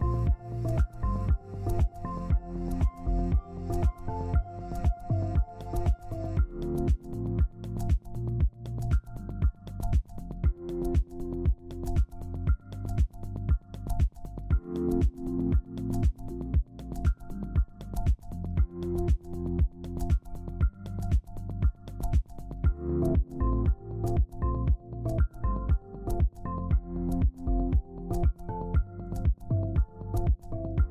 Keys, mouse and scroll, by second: 4.6 ctrl+space, 6.5 ctrl+k, 7.9 double click, 13.6 double click, 18.1 right click, 19.5-20.0 scroll down 1, 21.2 ctrl+space, 22.1 scroll down 1, 22.4 typing, 23.7 ctrl+space.